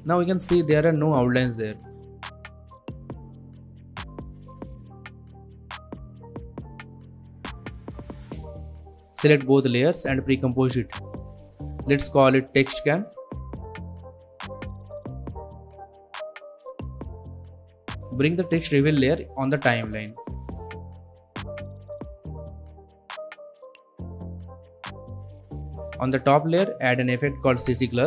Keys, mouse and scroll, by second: 1.7 space, 5.1-8.1 drag, 10.3 right click, 11.6 click, 12.4-14.2 typing, 14.8 Return, 15.8-17.2 drag, 27.9 click.